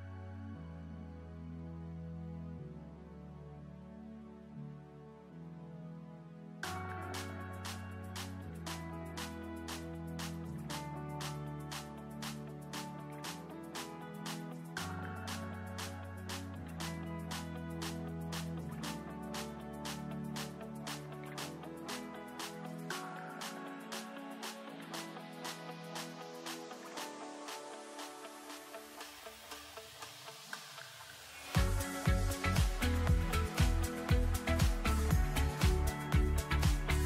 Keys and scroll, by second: 10.5 ctrl+z, 16.7 space, 20.9 space, 27.1 space.